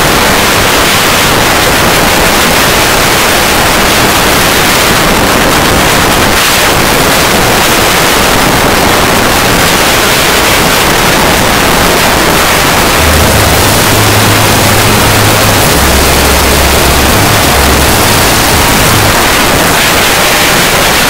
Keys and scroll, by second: 0.2 Up, 0.3 Up, 0.8 shift+h, 1.0 Return, 19.1 Page_Down.